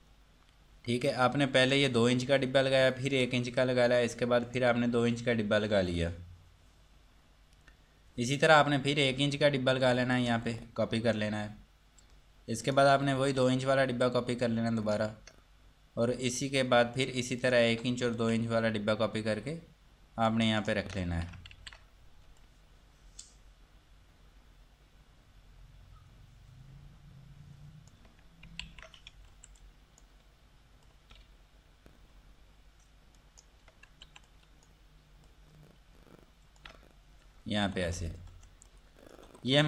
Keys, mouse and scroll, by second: 1.8 click, 9.2 click, 10.4 ctrl+right click, 12.9 click, 15.0 ctrl+right click, 16.5 click, 17.6 shift+click, 21.7 ctrl+z, 22.6 click, 29.8 click, 33.4 ctrl+right click, 34.3 F2, 34.5 click, 37.4 scroll down 1, 37.8 F3, 38.9 click, 39.5 Escape.